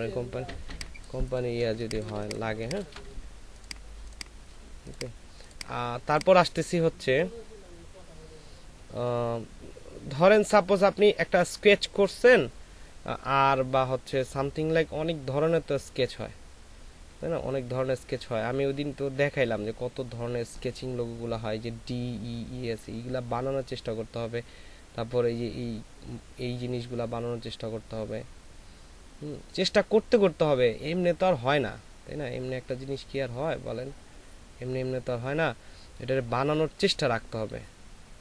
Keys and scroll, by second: 0.6 space, 2.5 ctrl+alt+space.